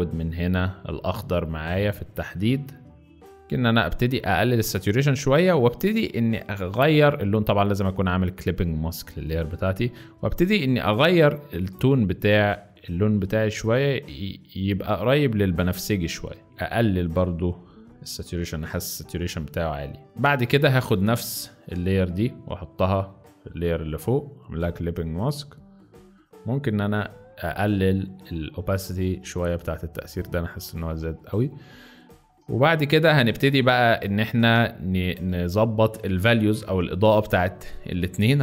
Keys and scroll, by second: 20.0 z, 20.2 space, 21.4 alt+space, 24.6 alt+z, 31.2 z, 32.7 z, 34.5 space.